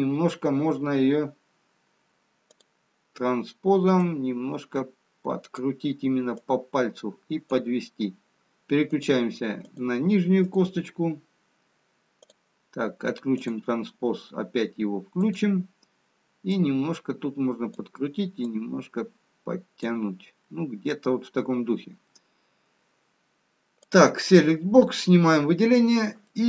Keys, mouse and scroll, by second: 2.5 click, 4.7 click, 6.6 click, 11.2 click, 12.2 click, 13.5 click, 15.4 click, 16.8 click, 18.9 click, 20.9 middle click, 24.0 click.